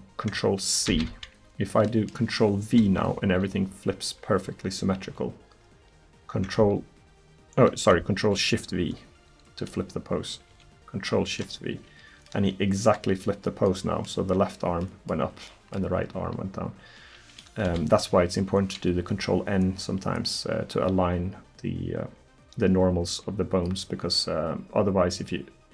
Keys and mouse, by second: 0.9 ctrl+c, 2.6 KP_1, 10.5 ctrl+shift+v, 15.0 click, 17.7 KP_1.